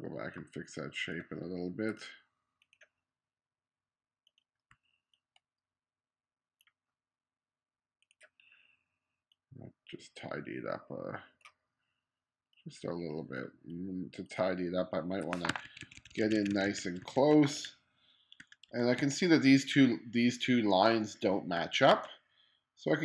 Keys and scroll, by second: 4.8 q, 15.5 2, 18.4 1, 19.0 2, 21.6 1.